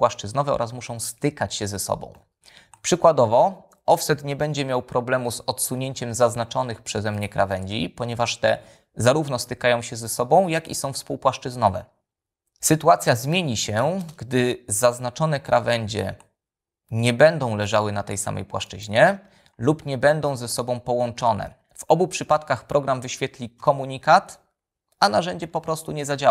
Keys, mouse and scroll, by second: 5.8 f, 6.9 click, 8.1 click, 14.5 space, 17.9 click, 19.9 shift+click, 24.1 f.